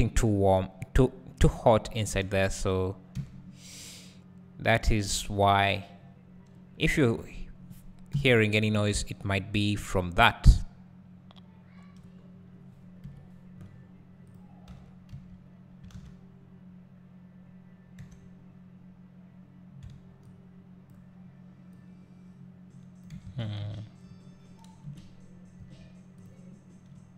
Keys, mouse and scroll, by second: 1.7 `, 2.3 Tab, 2.7 scroll down 1, 3.1 `, 5.5 scroll down 1, 6.8 `, 8.1 KP_1, 9.0-9.9 scroll down 1, 9.9 z, 10.5 `, 12.3-12.9 scroll up 1, 13.0 KP_1, 13.7-14.3 scroll up 1, 14.3 click, 14.7 Tab, 15.9 alt+a, 18.0 3, 20.9 b, 21.7-26.2 drag, 23.3 ctrl+z, 24.8 KP_Decimal, 26.2 z.